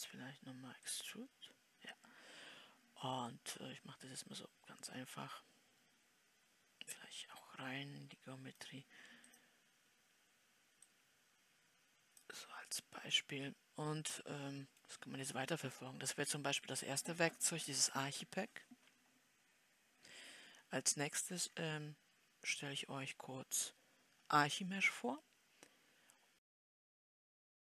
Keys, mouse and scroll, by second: 11.3-13.3 drag, 13.3 scroll up 1, 13.4-21.3 middle drag, 21.3 scroll down 4, 25.9-27.7 middle drag.